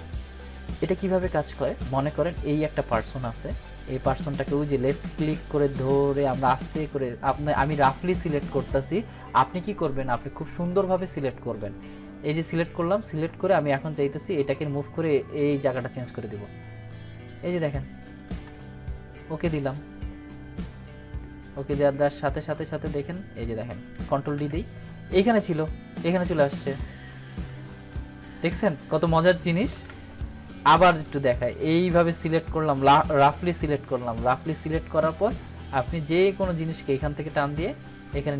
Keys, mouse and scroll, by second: 3.3-11.7 drag, 23.9 click, 24.3 ctrl+d, 27.6 ctrl+z, 28.4 ctrl+z, 29.7 ctrl+d, 30.8-34.6 drag.